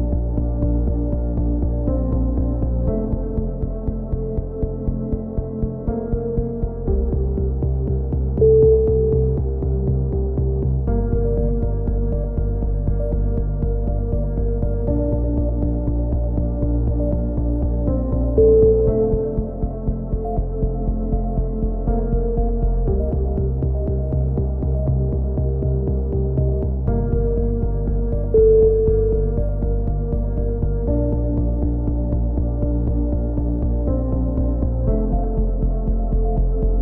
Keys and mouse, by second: 1.4-2.6 drag, 3.5 a, 5.5 drag, 5.8-6.2 middle drag, 6.2 z, 6.5 right drag, 6.5 z, 6.7 middle click, 7.3 drag, 7.6 a, 7.7 z, 7.9 z, 8.9 drag, 11.0 KP_3, 11.5-13.0 middle drag, 13.0-14.9 drag, 14.9 a, 15.4 ctrl+r, 16.2 right click, 17.4-17.9 drag, 17.9 a, 23.2-25.1 drag, 23.2-23.7 right drag, 25.1 a, 25.7 click, 27.2 a, 27.4 z, 27.5 z, 27.9 z, 28.2 click, 28.6 drag, 29.2 middle click, 29.6-30.3 middle drag, 30.3 KP_3, 30.5 z, 31.6 ctrl+r, 32.4 a, 32.6 click, 32.8 drag, 33.1-33.4 middle drag, 33.4 right click, 34.1-34.7 drag, 34.7 a, 34.9 z, 35.3-35.7 drag.